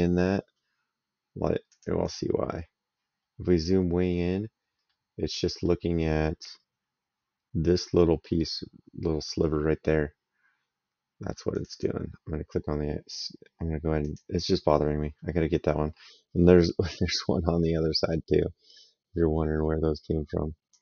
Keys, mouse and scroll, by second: 1.5 click, 4.7 middle click, 11.3 click, 13.8 click, 16.2 middle click, 16.6 right click, 20.5 click.